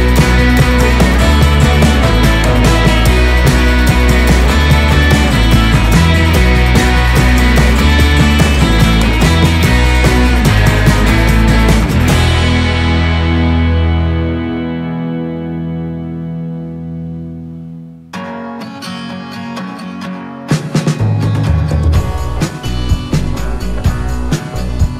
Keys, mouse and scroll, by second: 8.1 click.